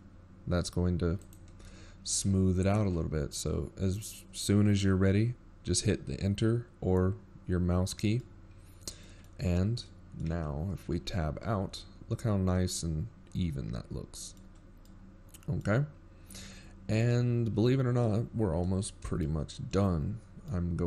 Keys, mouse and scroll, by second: 7.7-9.8 scroll up 3, 9.8-11.1 scroll down 2, 13.9 middle click, 15.6 middle click, 16.0 Tab, 17.2 middle click, 20.7 middle click.